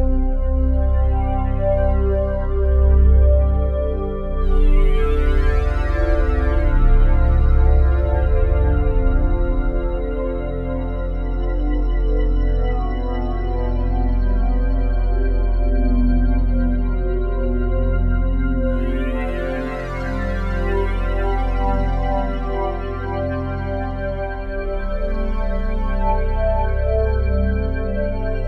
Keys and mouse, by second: 0.0-2.5 drag, 2.7-5.4 drag, 5.4 0, 5.7 Return, 6.2 click, 6.9-7.7 typing, 7.9 Return, 9.1 click, 10.4 click, 11.2 ctrl+alt+click, 11.7-13.0 alt+drag, 13.0 1, 13.8-15.1 alt+shift+drag, 14.7 typing, 18.9-22.7 drag, 23.8-28.4 drag.